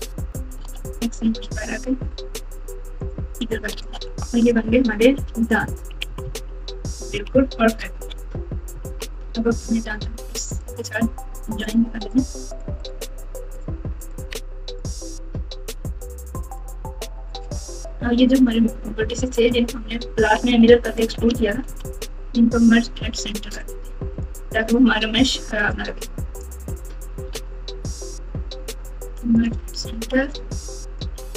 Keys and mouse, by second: 0.6 alt+z, 1.2 g, 3.4 click, 3.7 alt+z, 4.4 Tab, 5.2 alt+z, 5.9-7.1 typing, 7.6 KP_Subtract, 8.0 KP_Subtract, 8.7 KP_6, 8.8 KP_6, 9.6 click, 11.1-12.6 right drag, 15.7 Tab, 16.7 click, 19.6-20.3 ctrl+KP_6, 20.5-21.0 ctrl+KP_8, 21.5 KP_Add, 21.6 KP_Add, 24.2 click, 24.3 click, 25.3 m, 26.5 click, 27.3 alt+z, 28.3 click, 29.1 m, 30.6 click.